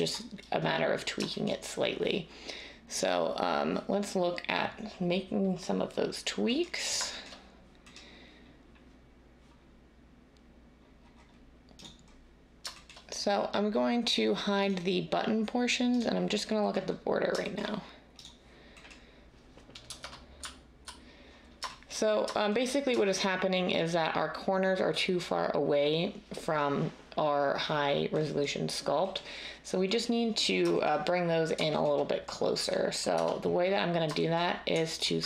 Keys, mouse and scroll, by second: 19.8-20.3 typing, 33.1 Tab.